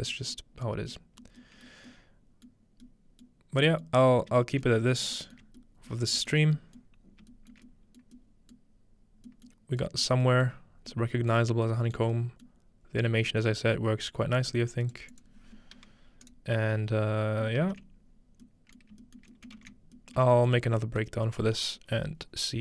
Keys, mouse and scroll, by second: 1.4 middle click, 1.7 middle click, 2.6 middle click, 2.6-4.2 scroll down 1, 3.3 middle click, 4.3 shift+middle click, 4.6 shift+middle click, 5.0 shift+middle click, 5.4 shift+middle click, 6.0 alt+shift+middle click, 6.3 alt+shift+middle click, 6.9-9.3 scroll up 1, 8.7 middle click, 9.5 middle click, 10.4 middle click, 10.7-12.4 scroll down 2, 11.3 middle click, 12.0 middle click, 12.5-14.4 middle drag, 14.4-17.0 drag, 14.8-16.2 right drag, 18.8 ctrl+shift+middle click, 19.6 ctrl+shift+middle click, 20.2 shift+middle click, 20.6 middle click, 21.0-22.6 middle drag.